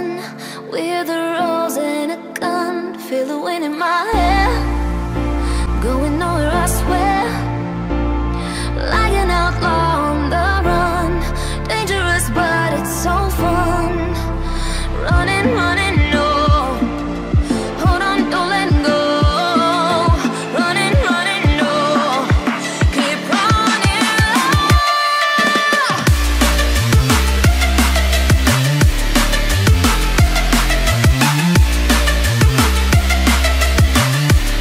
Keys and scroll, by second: 20.2 ctrl+g, 20.8 ctrl+alt+shift+e.